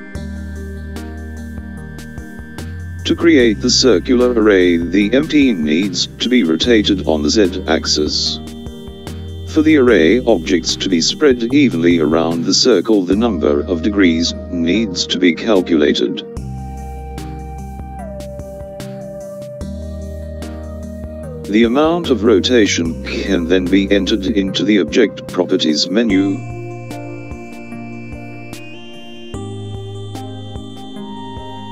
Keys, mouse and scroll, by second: 3.3 click, 13.0 click.